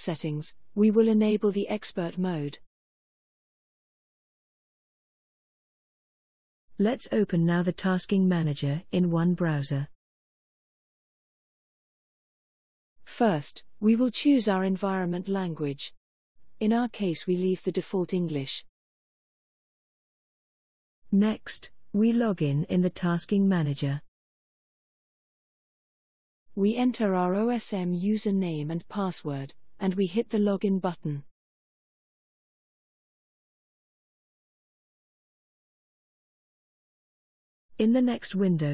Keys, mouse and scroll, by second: 3.6 click, 6.9 click, 16.4 click, 19.1 click, 23.7 click, 26.1 click, 27.4 shift+u, 27.8 shift+n, 29.5 click, 30.1 click, 31.2-35.0 typing, 36.1 click, 37.7-38.6 scroll down 2.